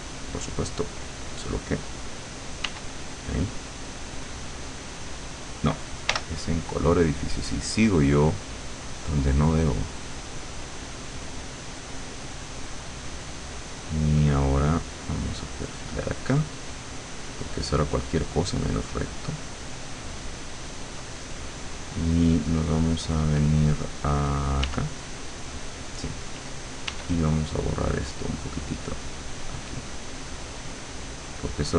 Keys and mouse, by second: 2.7 w, 6.1 l, 7.3 click, 8.0-10.2 drag, 10.5 click, 12.7 click, 15.3 click, 15.7 click, 16.2 click, 19.9-21.5 drag, 24.7 w, 26.9 e, 28.9-31.7 drag.